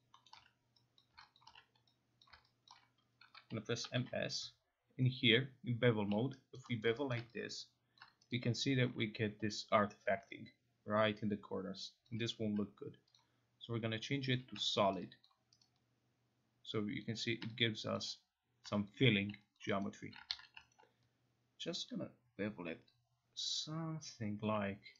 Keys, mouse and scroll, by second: 0.3 alt+middle click, 1.0 shift+click, 2.2 shift+click, 2.7 alt+click, 3.6-4.4 typing, 6.5 alt+right click, 6.8 alt+middle click, 8.0 click, 8.3 alt+right click, 8.9 alt+click, 10.2 alt+click, 12.1 alt+click, 13.1 click, 14.3 click, 14.9 alt+right click, 15.2 alt+click, 16.1 alt+right click, 17.0 alt+click, 17.9 alt+click, 18.9 alt+click, 19.5 alt+click, 19.8 alt+right click, 20.3 ctrl+z, 20.7 alt+right click, 24.5 click.